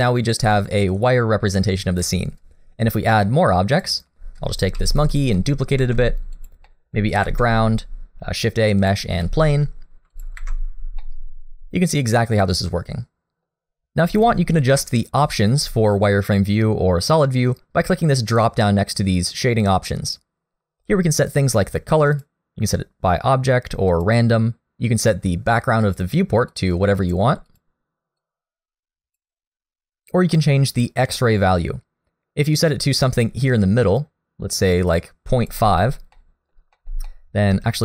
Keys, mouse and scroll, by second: 3.2 middle click, 3.8 click, 4.8 shift+d, 5.4 middle click, 5.8 shift+d, 6.7 middle click, 7.2 shift+a, 9.2 s, 10.4 alt+a, 10.7-11.4 scroll down 2, 11.0 middle click, 20.1 click, 35.9 scroll up 1, 36.2 middle click, 36.8 middle click, 37.1 shift+middle click, 37.6 scroll up 1.